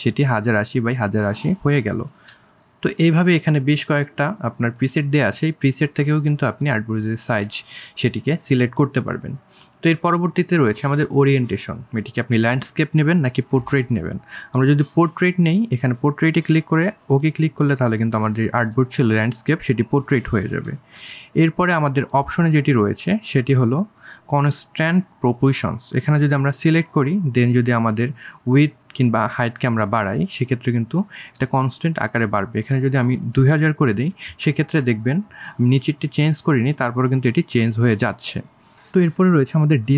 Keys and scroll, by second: 18.4 ctrl+z, 31.4 KP_2, 31.7 KP_0, 32.0 KP_0.